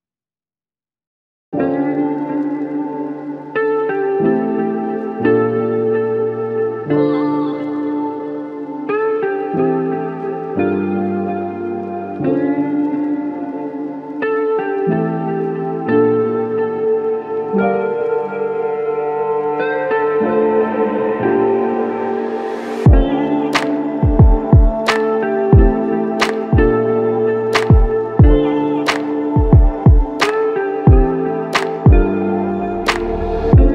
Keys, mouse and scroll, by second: 7.2-7.5 typing, 7.9 Return, 17.0 ctrl+alt+click, 21.4 alt+click, 25.5 ctrl+alt+click, 27.5 ctrl+alt+click.